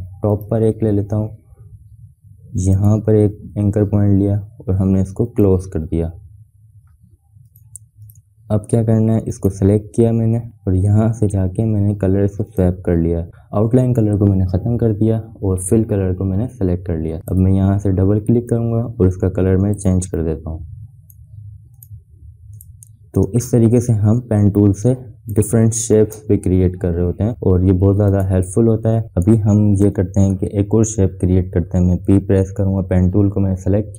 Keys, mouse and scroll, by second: 0.4 shift+click, 2.8 shift+click, 5.3 shift+click, 7.5 click, 12.5 click, 17.3-21.8 drag, 23.3 space, 23.5 click, 23.8 space, 26.2 ctrl+0, 28.1 click, 30.2 BackSpace, 32.6 p.